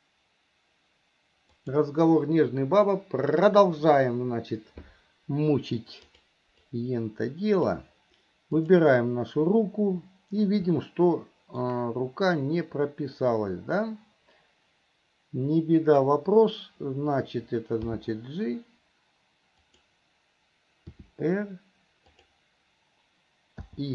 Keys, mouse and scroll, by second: 6.3 click, 6.9-8.0 drag, 8.8 click, 11.0 shift+middle click, 13.6-16.3 drag.